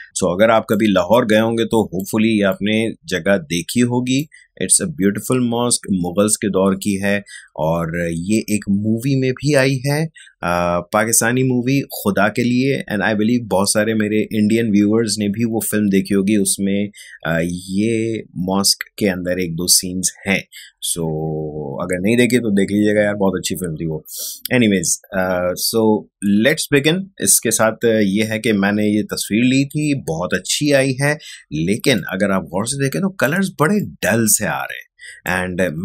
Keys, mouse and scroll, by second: 1.1-4.4 ctrl+drag, 31.2 space, 31.9 click, 32.0 space, 33.7 click, 33.8 space.